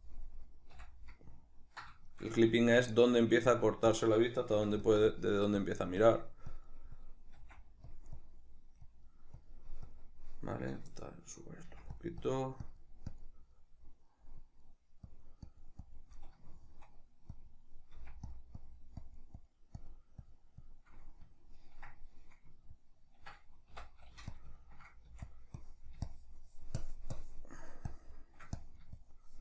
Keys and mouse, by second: 0.7 n, 1.4-2.9 ctrl+middle drag, 2.9-4.9 drag, 4.6 f, 5.1-8.0 drag, 7.4 f, 8.2-10.7 drag, 11.0-12.0 shift+middle drag, 11.6 f, 12.2-13.6 drag, 13.6 middle click, 14.4-16.2 drag, 16.2-17.4 middle drag, 17.4-18.4 drag, 18.0 f, 18.6-20.9 drag, 21.0-24.4 middle drag, 23.7 i, 24.4 click, 24.6 ctrl+middle click, 25.1 f, 25.7-29.4 drag.